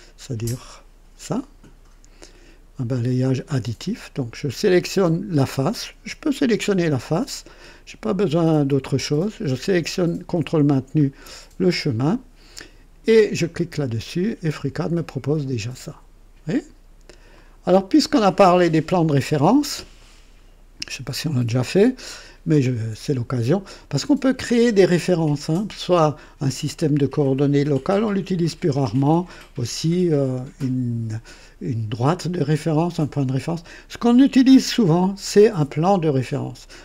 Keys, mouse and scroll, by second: 10.7 ctrl+click, 13.3 click, 14.9-16.8 drag, 17.3 click, 19.5 scroll up 2, 20.0-20.6 right drag, 21.2-22.4 drag.